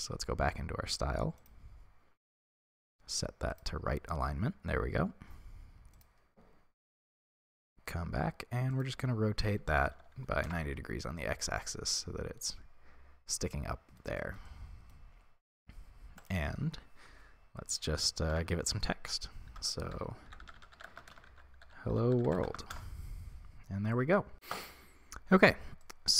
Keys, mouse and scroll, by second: 1.8-3.7 scroll down 1, 3.7-11.6 drag, 10.6 Return, 11.6-22.8 middle drag, 22.8-24.0 drag, 22.9 Return, 24.0-26.1 middle drag.